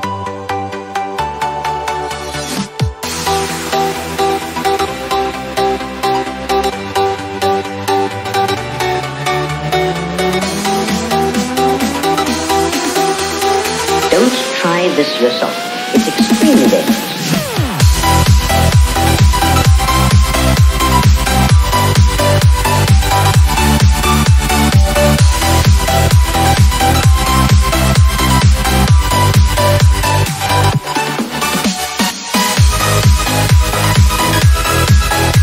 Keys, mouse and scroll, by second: 2.0 click, 6.4 ctrl+v, 7.1 Return, 9.9 click, 10.9 ctrl+c, 13.0 ctrl+click, 16.8 click, 19.6 ctrl+v, 20.7 Return, 22.5 click, 23.8 ctrl+c, 25.3 ctrl+click, 26.7 click, 28.9 click, 30.5 click, 31.4 ctrl+v, 32.1 Return, 33.3 click, 34.3 ctrl+c.